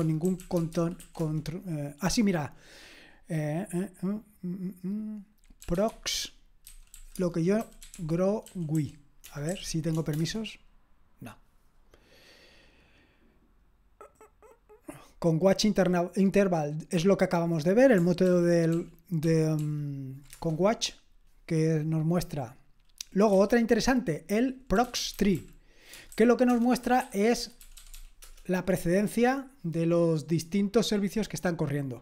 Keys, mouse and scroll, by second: 0.0-1.5 typing, 5.4-9.5 typing, 10.2 Return, 18.2 ctrl+p, 18.7 ctrl+p, 19.2 ctrl+p, 19.6 ctrl+p, 23.3 q, 24.5-28.4 typing.